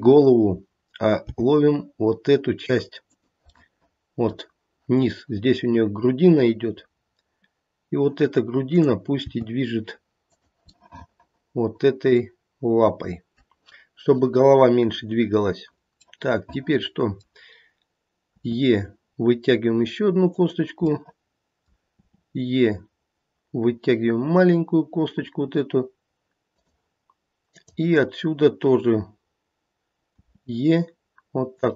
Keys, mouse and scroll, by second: 0.1 click, 1.2 g, 3.6 middle click, 8.6 click, 9.2 g, 10.8 middle click, 11.1 middle click, 12.1 middle click, 14.6 scroll down 1, 16.2 middle click, 16.6 middle click, 18.3 e, 20.8 middle click, 21.9 e, 27.5 click, 30.2 e.